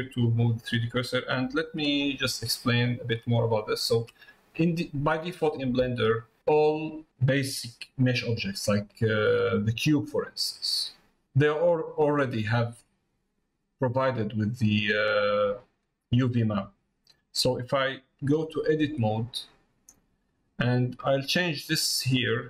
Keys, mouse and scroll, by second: 3.4 middle click, 4.4 middle click, 10.3 middle click, 11.1 middle click, 11.6 middle click, 12.4 middle click, 13.5 middle click, 14.1 middle click, 15.2 middle click, 15.8 middle click, 16.5 middle click.